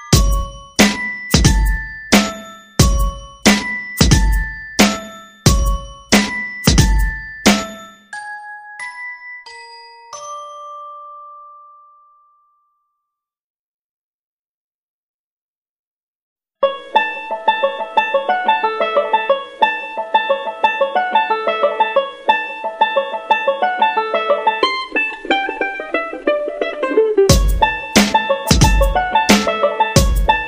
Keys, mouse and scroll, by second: 2.9 Left, 4.4 ctrl+click, 6.3 click, 7.2 click, 14.5 KP_0, 16.1 click, 17.6 KP_3, 19.0 click, 20.2 KP_0, 21.7 click, 23.3 F9, 23.9 click, 27.8 shift+click, 28.3 shift+click, 29.2 shift+click, 30.0-30.4 drag.